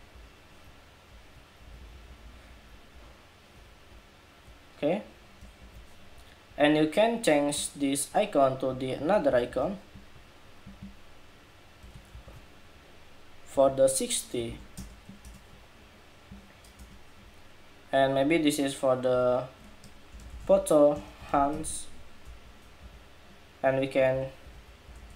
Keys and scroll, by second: 1.4 alt+Down, 1.5 alt+Down, 1.7 alt+Down, 1.8 alt+Down, 2.0 alt+Down, 2.1 alt+Down, 2.4 alt+Down, 2.7 alt+Down, 4.0 alt+Down, 5.3 super+=, 6.5 super+=, 9.0 super+c, 9.3 super+c, 11.8 shift+super+v, 18.9 super+a, 22.5 Escape.